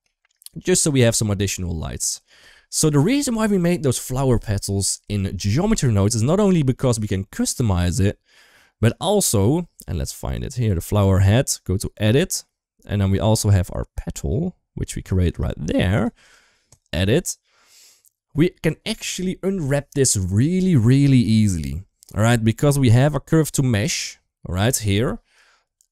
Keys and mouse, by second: 0.2-0.7 middle drag, 1.0 middle click, 1.7 ctrl+s, 1.8 shift+middle drag, 2.2 middle click, 3.0 click, 3.2 shift+middle drag, 6.6 middle click, 8.3 click, 8.6 right click, 10.3 click, 10.8-12.0 right drag, 13.3-14.7 middle drag, 15.7 click, 16.1 right click, 17.8 click, 20.5 middle click, 21.5 middle click, 22.7-24.5 middle drag, 25.1-25.9 drag.